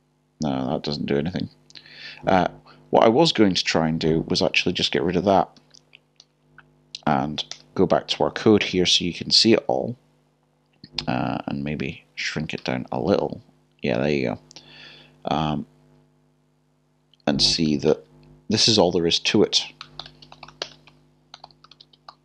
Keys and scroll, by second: 4.4-5.9 typing, 7.3-8.1 typing, 19.6-20.3 typing.